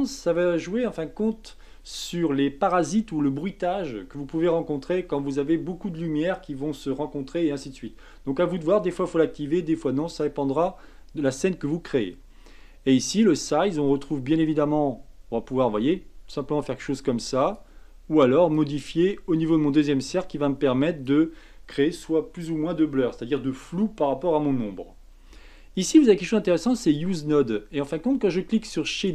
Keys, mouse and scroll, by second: 13.4-16.4 drag, 18.5-21.5 drag, 26.8-27.3 drag.